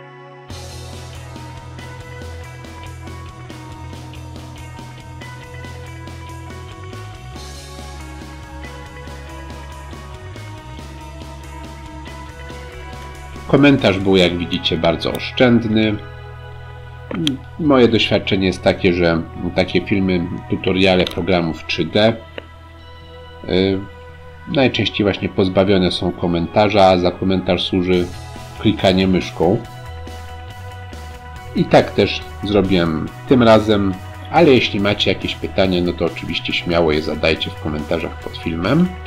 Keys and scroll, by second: 31.6 Delete, 33.5 Delete, 34.8 Delete, 36.1 Delete, 37.0 Delete.